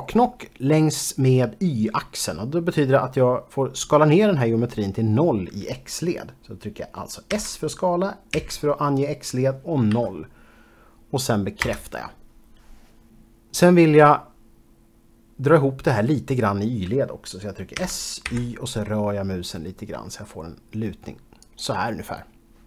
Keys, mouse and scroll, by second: 7.5-8.5 typing, 10.0 0, 11.8 Return, 17.9-18.4 typing, 21.6 click.